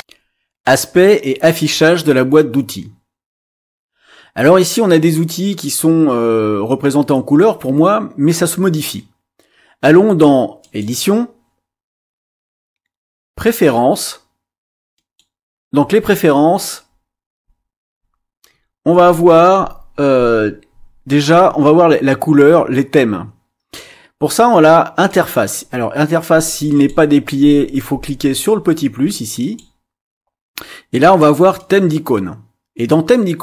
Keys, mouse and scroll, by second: 0.0 click, 25.0 click, 26.7 click, 29.4 click, 31.6 click.